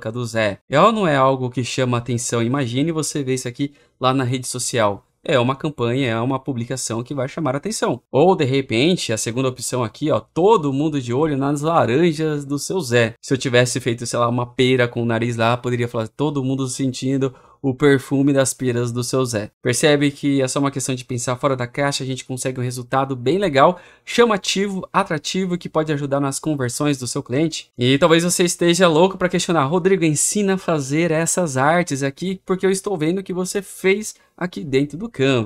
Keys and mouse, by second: 10.0-35.4 drag.